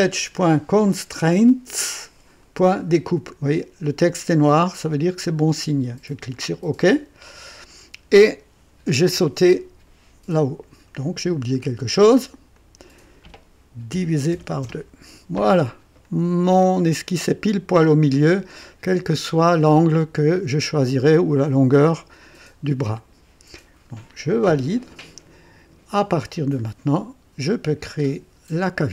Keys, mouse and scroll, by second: 4.8-5.5 drag, 6.3 click, 11.5 click, 12.5 click, 13.9 KP_Divide, 14.3 KP_2, 14.6 Return, 16.0-17.4 drag, 24.5 click, 28.0 click.